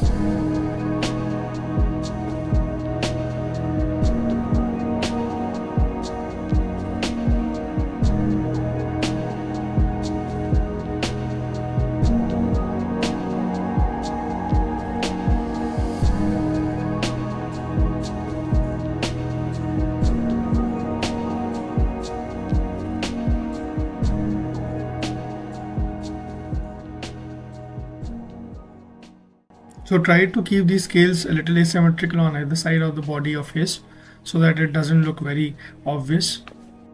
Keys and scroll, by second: 0.8 ctrl+z, 6.6 ctrl+z, 10.1 z, 23.3 x, 29.6 f.